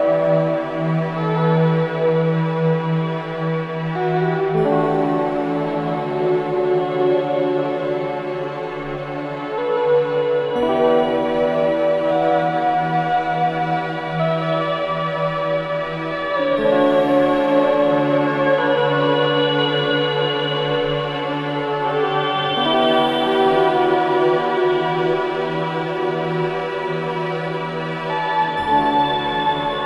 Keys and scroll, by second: 16.8 4, 17.3 ctrl+z.